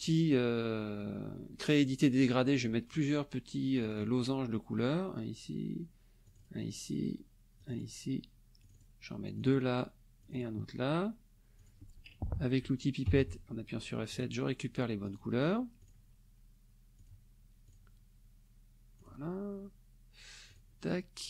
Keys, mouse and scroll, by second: 3.8 click, 6.2 click, 7.6 click, 8.6 click, 9.2 click, 10.2 click, 11.6 click, 13.1 F7, 14.1 click, 15.1 click, 15.8 click, 17.0 click, 17.6 click, 19.0 click, 20.5 click.